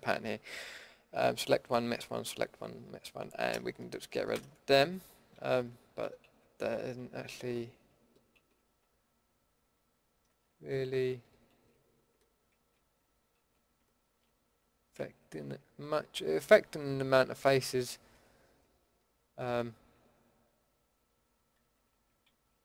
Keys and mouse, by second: 4.3 ctrl+x, 5.4 ctrl+z, 6.2 ctrl+x, 7.4 ctrl+z, 8.3 ctrl+x, 10.1 ctrl+z, 11.5 ctrl+x, 12.5 ctrl+z, 13.3 ctrl+x, 14.0 ctrl+z, 15.0 ctrl+x, 17.9 ctrl+z, 21.6 ctrl+x, 22.3 ctrl+z.